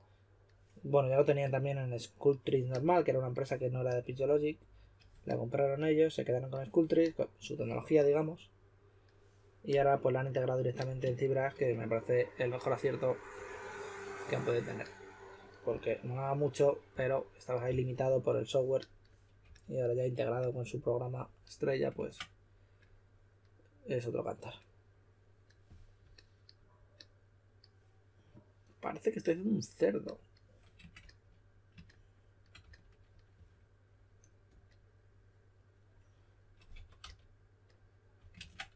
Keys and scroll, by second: 13.3 typing, 15.6 typing, 16.9-17.6 typing, 19.4 typing, 21.9 super+z, 31.0 s, 32.6-33.8 typing, 36.5-37.5 typing, 38.3 super+z.